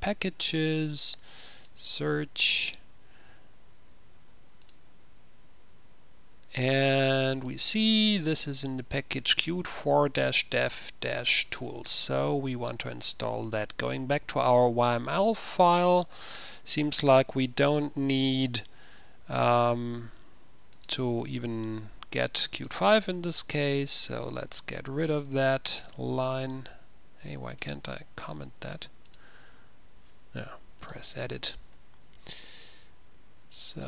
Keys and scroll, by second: 12.2 ctrl+c, 23.5 q, 23.7 q, 32.6 typing.